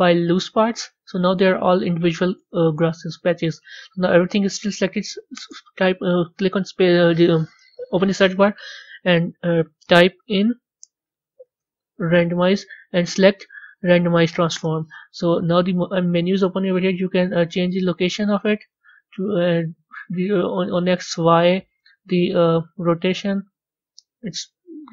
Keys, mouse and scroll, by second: 2.3 Tab, 3.0-5.1 middle drag, 5.1 space, 16.3 click, 17.4-24.9 drag.